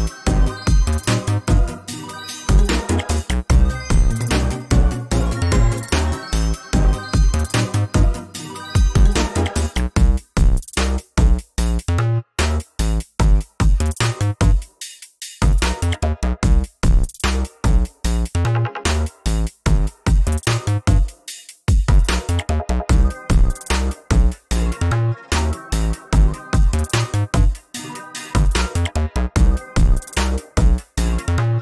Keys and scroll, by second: 1.4 ctrl+space, 2.9 ctrl+v, 9.9 ctrl+alt+z, 11.2 ctrl+space, 11.7 ctrl+z, 14.0 ctrl+space, 21.8 ctrl+z, 27.8 ctrl+z.